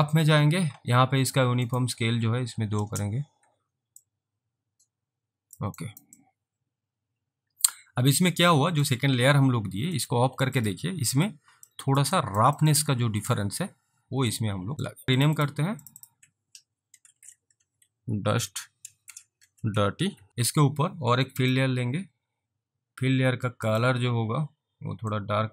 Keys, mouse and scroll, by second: 1.7 click, 2.4 2, 2.8 Return, 4.1 alt+click, 5.9 alt+right click, 6.3 alt+click, 11.8 alt+click, 12.3 alt+right click, 12.7 alt+middle click, 13.1 alt+click, 14.3 click, 14.9 alt+click, 15.0 double click, 15.2 click, 15.4 double click, 15.8 click, 16.0 double click, 17.3-20.7 typing, 21.4 click, 23.7 click, 25.2 click.